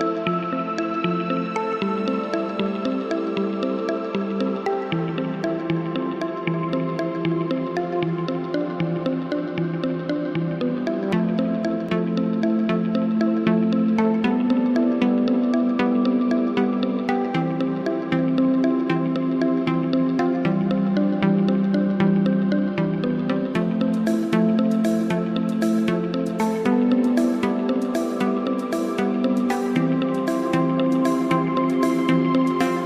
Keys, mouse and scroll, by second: 0.8 click, 3.3-5.2 drag, 11.8-12.2 click, 12.7 1, 14.1 click, 17.6-18.2 shift+drag, 30.5 shift+click.